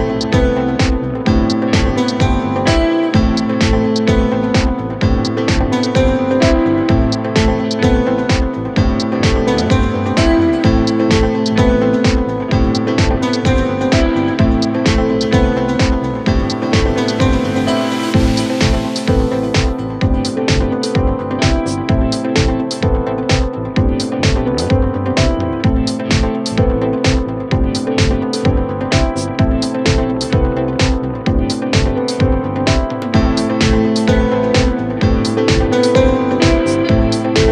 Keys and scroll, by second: 28.7 ctrl+z, 29.6 KP_Add, 36.1 ctrl+r.